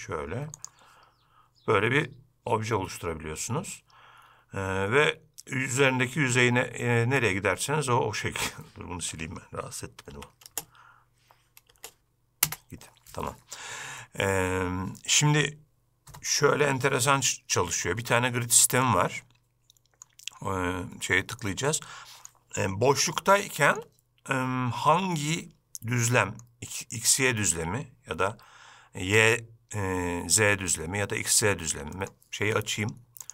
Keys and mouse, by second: 10.2 x, 18.9-20.1 middle drag, 21.5-22.4 middle drag, 23.2-23.9 shift+middle drag, 25.2-26.5 middle drag, 32.1 middle click.